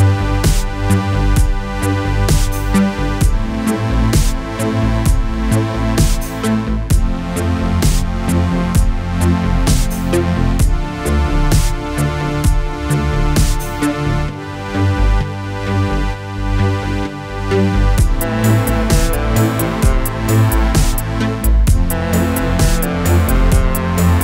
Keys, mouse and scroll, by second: 1.2 click, 3.7 click, 6.5 click, 7.2 Return, 8.4 click, 15.2 click, 21.8 click.